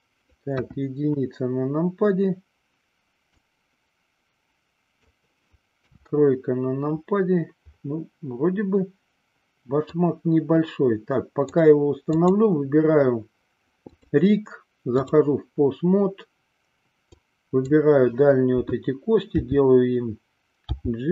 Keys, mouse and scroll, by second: 0.7 KP_1, 3.5-5.4 drag, 6.1 KP_3, 10.1-11.8 drag, 12.4 click, 14.0-15.4 drag, 17.2-18.1 drag, 19.6 r.